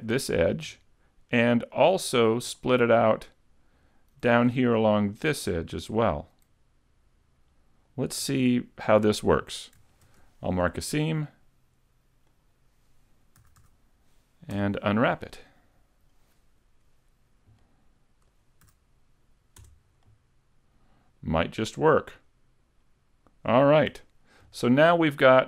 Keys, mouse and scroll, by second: 0.0-1.0 scroll down 1, 2.1 shift+right click, 2.6 middle click, 5.2 alt+shift+right click, 5.8 middle click, 10.1 ctrl+e, 13.4 a, 13.6 a, 14.6 u, 17.6 middle click, 18.7 a, 19.6 Tab, 20.1 middle click, 23.9 a, 24.2-24.8 scroll down 2, 24.6 shift+middle click, 25.2 middle click.